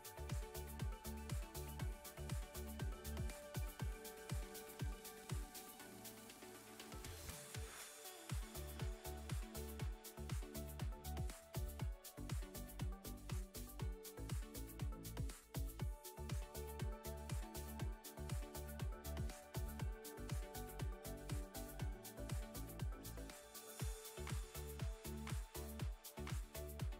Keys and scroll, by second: 0.7 Tab, 3.6 Tab, 4.7 a, 6.6 g, 7.3 z, 9.1 KP_1, 11.6 g, 12.1 z, 15.6 Tab, 19.2 g, 19.8 x, 22.2 shift+a.